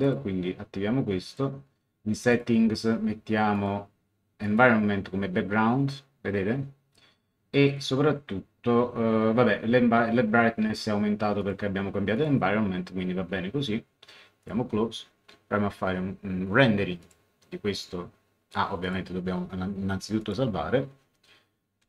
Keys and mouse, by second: 1.2 click, 2.3 click, 3.5 click, 11.4 click, 14.4 click, 17.0 click, 18.8 click, 20.2 click.